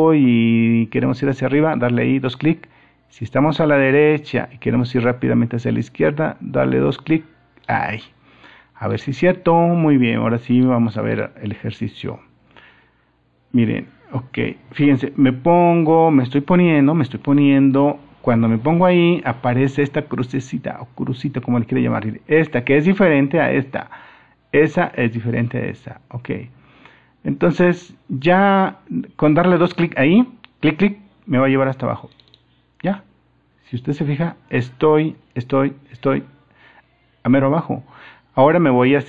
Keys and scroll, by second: 14.3 super+-.